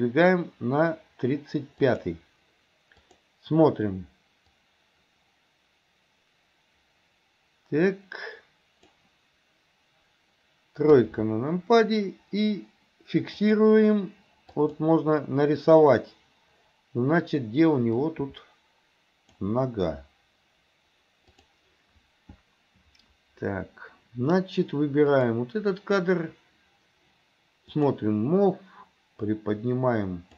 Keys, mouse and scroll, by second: 3.1 click, 4.6-9.1 drag, 10.9 KP_3, 13.5 click, 14.6 click, 18.1-19.5 drag, 21.4 click, 25.2 click, 27.8 click, 29.3-30.3 drag.